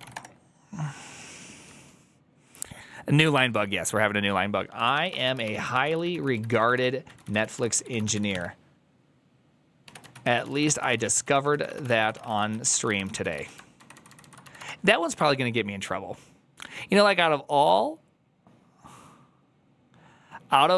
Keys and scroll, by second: 0.0-0.5 typing, 4.6-14.4 typing, 14.4 Right.